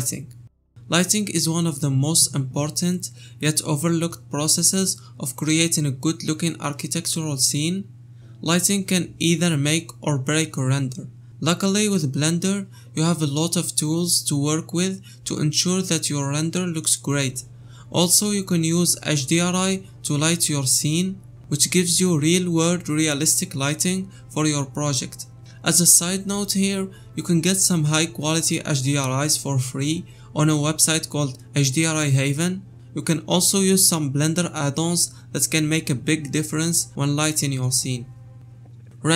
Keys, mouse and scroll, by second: 38.3 KP_0.